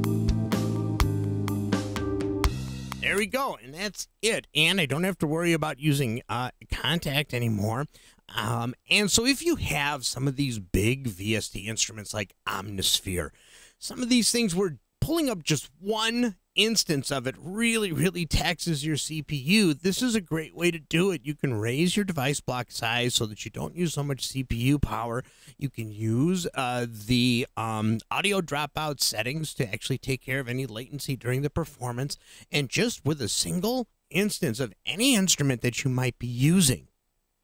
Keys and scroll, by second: 3.1 space.